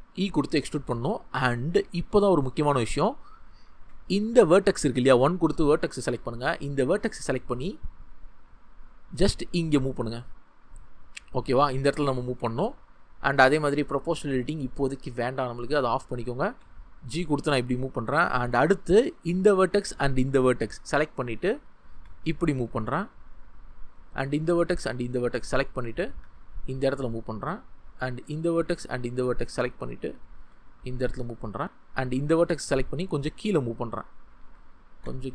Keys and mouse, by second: 0.0 e, 1.1 click, 3.6 shift+click, 4.4 1, 9.0 g, 9.1-12.0 drag, 12.1 click, 14.3 ctrl+z, 15.6 click, 16.4 g, 17.3 click, 21.8 g, 21.8-23.9 drag, 26.0 g, 26.1-27.1 drag, 30.3 g, 30.3 click, 31.2 click, 33.8 click, 34.4 ctrl+z, 34.9 g, 35.0-35.3 drag.